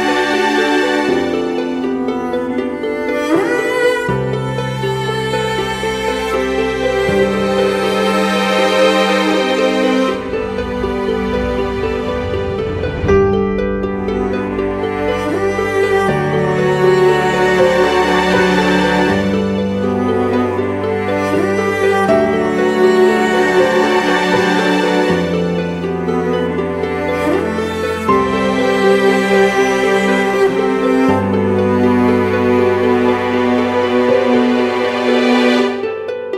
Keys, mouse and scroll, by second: 0.5-0.9 typing, 1.2 double click, 10.5 [, 10.7 [, 11.4 double click, 19.5 right click, 21.2-21.9 typing, 21.5 double click, 22.2 double click, 25.1 [.